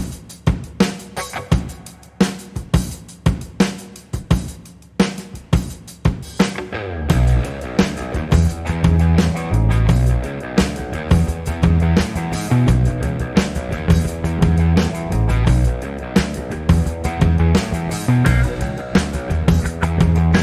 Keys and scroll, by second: 6.9 t, 10.9-16.6 typing, 18.1-20.4 typing.